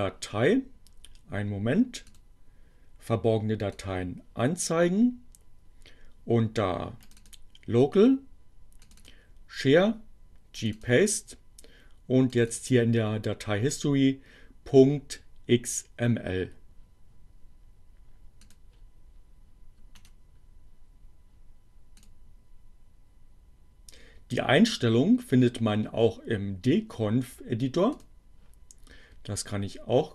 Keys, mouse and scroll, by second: 2.0 click, 3.4 click, 7.0 click, 8.9 click, 10.1-11.1 drag, 12.1 click, 18.5 click, 19.9 right click, 22.0 click, 27.9 click.